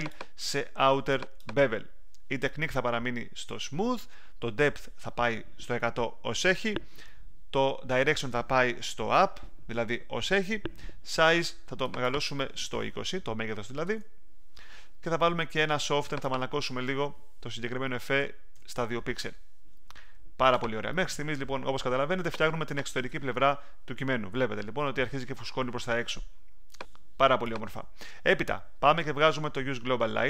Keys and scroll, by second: 13.5-14.3 typing, 18.5 2.